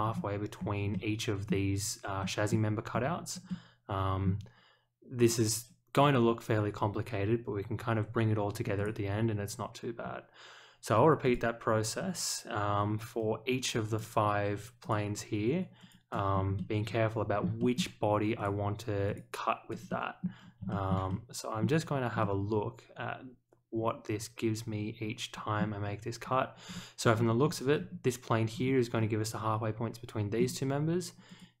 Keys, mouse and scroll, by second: 0.0 scroll down 2, 0.5 scroll up 1, 0.9 middle click, 2.2 middle drag, 2.9 scroll up 1, 3.4-4.2 middle drag, 5.1 click, 6.0 click, 8.7 click, 9.9 scroll up 1, 11.2 click, 13.8 click, 14.8 click, 15.7 click, 16.3 scroll up 1, 16.5-17.4 middle drag, 17.5 shift+middle click, 18.3 click, 19.0 click, 19.8-20.2 middle drag, 20.7 shift+middle click, 21.0-21.6 middle drag, 22.2-25.5 middle drag, 25.8 scroll down 1, 26.6 scroll down 1, 27.3-27.7 scroll down 1, 27.7 scroll up 1, 28.5-29.1 scroll down 4, 30.3-30.6 scroll up 2, 31.2 click.